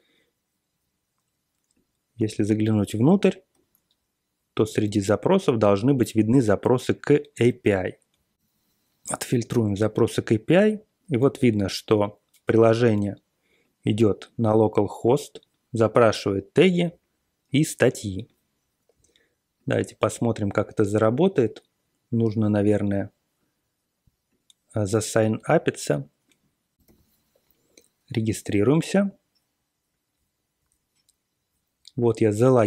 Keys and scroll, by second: 2.6 super+=, 2.9 super+=, 7.4 super+r, 8.1-8.8 typing.